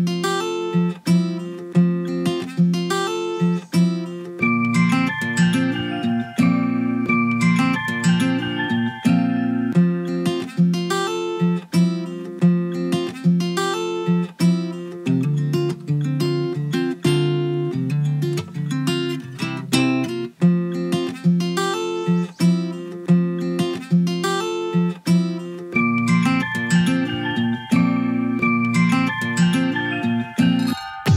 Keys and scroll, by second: 12.6 ctrl+a.